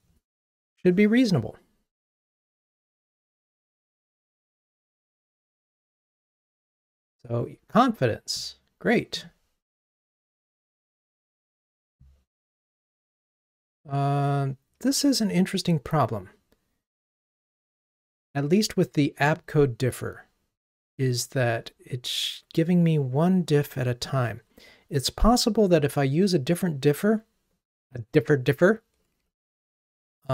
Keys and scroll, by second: 29.8 super+1.